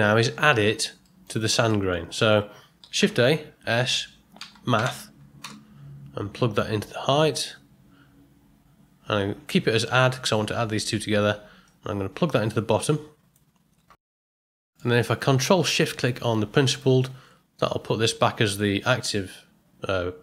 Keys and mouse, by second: 1.1 middle click, 1.6 middle click, 2.9 shift+a, 11.6-13.3 drag, 14.4 middle click, 16.7 ctrl+shift+click.